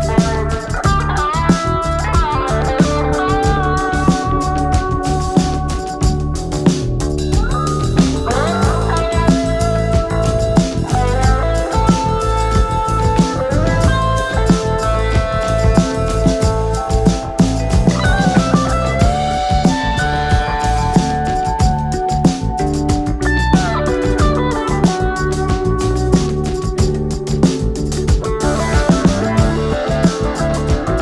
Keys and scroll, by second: 28.9 ctrl+z.